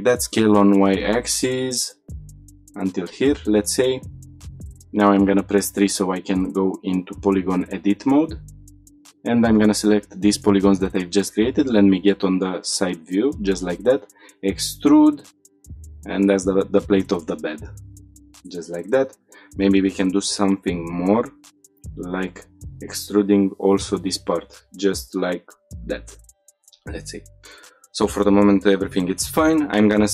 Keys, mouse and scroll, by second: 2.4 click, 2.9 Tab, 4.0 middle click, 4.6 3, 5.2 shift+middle click, 5.8 click, 7.1 shift+click, 8.3 shift+click, 9.4 click, 10.7 click, 11.3 shift+middle click, 11.9 scroll up 1, 12.2 shift+middle click, 14.0 e, 15.6 Tab, 15.6 shift+drag, 15.6 scroll down 3, 15.9 shift+middle click, 17.7-18.4 scroll up 2, 18.4 shift+middle click, 18.7 scroll up 1, 19.0 Tab, 20.6 click, 21.2 shift+click, 22.4 click, 23.3 e, 25.6 click, 26.2 Tab, 26.6 shift+middle click, 27.3 click, 27.4 Tab, 28.9 click.